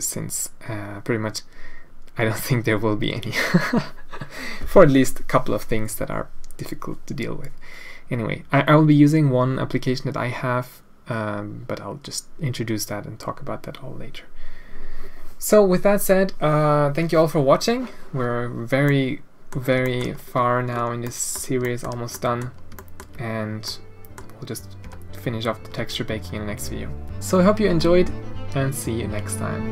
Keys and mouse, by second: 18.7 click, 19.1 middle click, 19.9 shift+middle click, 21.1 middle click, 21.6 shift+middle click, 22.1 middle click, 22.8 shift+middle click, 23.7 middle click, 24.8 Tab, 25.9 alt+a.